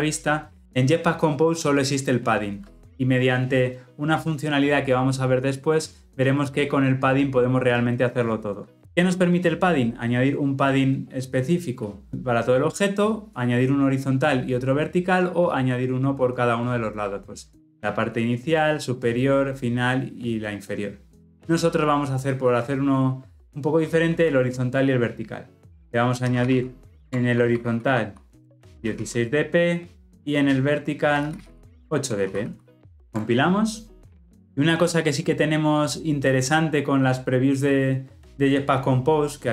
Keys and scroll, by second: 27.1 Return, 31.7 Return, 32.7 Escape, 32.9 ctrl+shift+5.